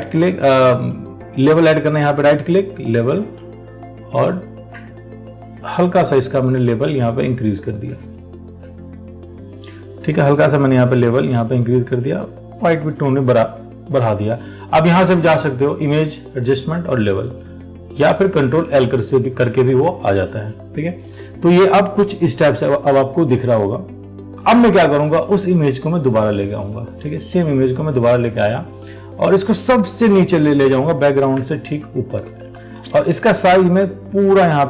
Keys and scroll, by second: 32.8 ctrl+t.